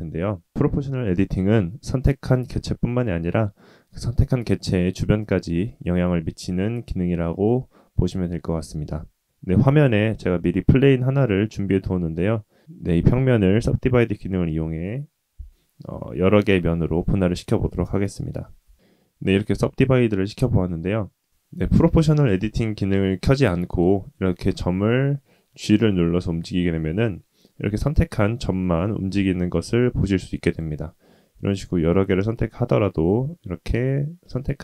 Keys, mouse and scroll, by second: 12.6-18.7 drag, 18.7 middle click, 23.6 click, 24.6 g, 28.3-29.7 middle drag, 30.0 click, 31.3 g.